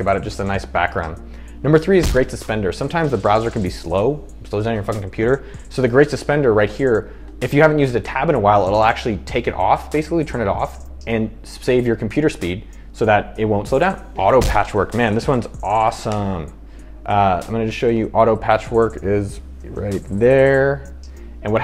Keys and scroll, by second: 15.3-16.7 typing, 17.7-18.4 typing.